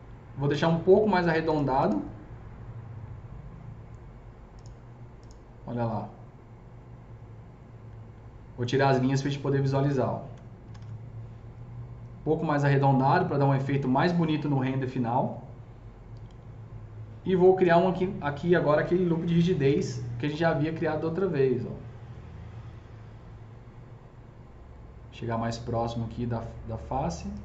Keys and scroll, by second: 10.3 F3, 10.5 F3, 10.6 F4, 17.5 F3, 19.6 KP_0.